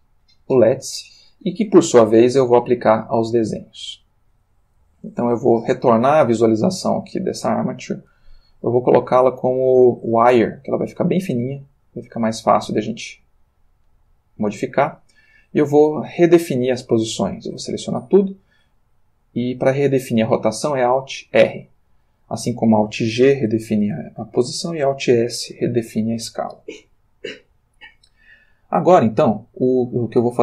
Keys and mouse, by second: 0.2 click, 5.1 click, 7.0 click, 8.0 click, 10.2 click, 11.8-12.3 drag, 12.8 r, 13.9 Escape, 17.5 a, 21.5 alt+r, 29.3 click.